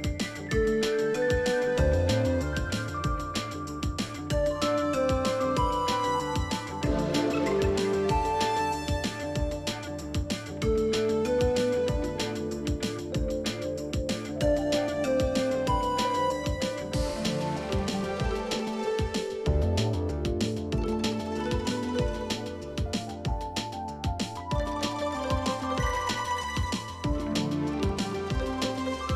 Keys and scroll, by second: 2.8 super+q, 25.0 ctrl+c.